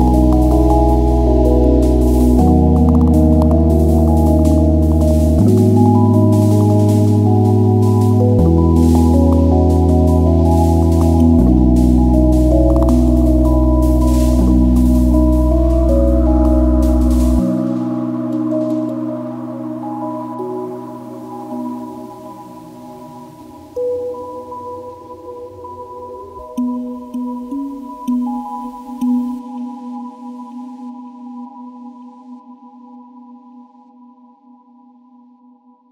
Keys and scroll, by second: 1.1 `, 14.0 ctrl+z, 18.3 `.